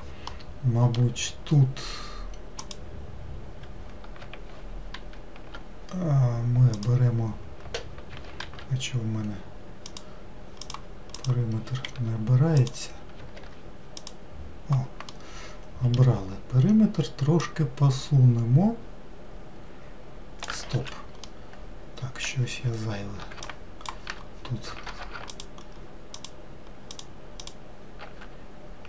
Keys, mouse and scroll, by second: 0.3-2.7 middle drag, 2.7 click, 5.0 shift+g, 8.5 shift+g, 10.7 click, 11.2 click, 11.9 shift+g, 13.4 shift+g, 15.1-17.5 middle drag, 17.5 click, 20.8 ctrl+z, 21.3-23.5 middle drag, 23.5 ctrl+click, 25.4 ctrl+click, 26.2 ctrl+click, 27.0 ctrl+click, 27.5-28.8 ctrl+drag.